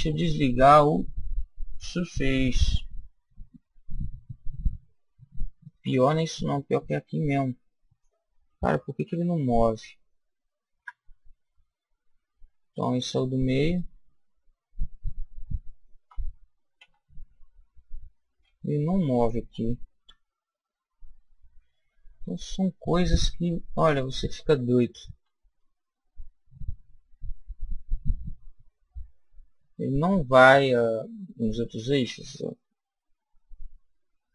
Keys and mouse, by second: 2.4-3.9 drag, 3.3 middle click, 3.6 middle click, 4.2 middle click, 6.2-8.1 right drag, 6.9 click, 9.1 g, 13.7-15.4 right drag, 16.1 g, 20.0 KP_7, 23.1 click, 25.6 g.